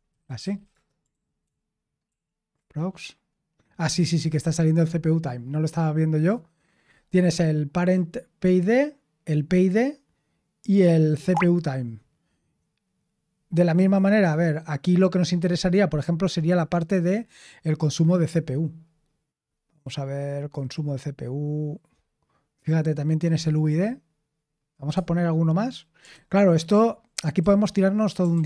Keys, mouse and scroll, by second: 0.0-1.1 typing, 1.4 ctrl+p, 2.0 ctrl+p, 17.7-20.3 scroll down 1, 20.3-20.8 scroll down 1, 20.8-23.2 scroll down 1, 23.2-26.0 scroll down 1, 26.0 super+h, 27.3 q, 28.3 ctrl+p.